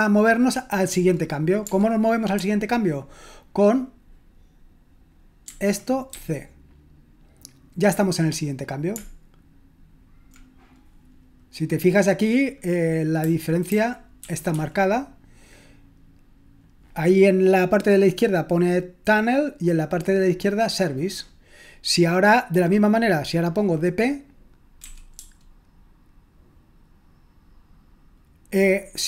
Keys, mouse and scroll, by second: 5.4-6.6 typing, 13.7-14.5 typing, 24.8-25.1 typing.